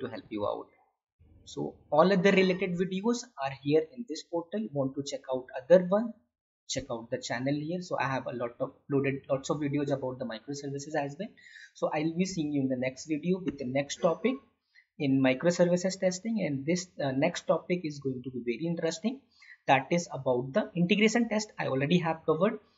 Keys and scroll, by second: 0.4 alt+Tab.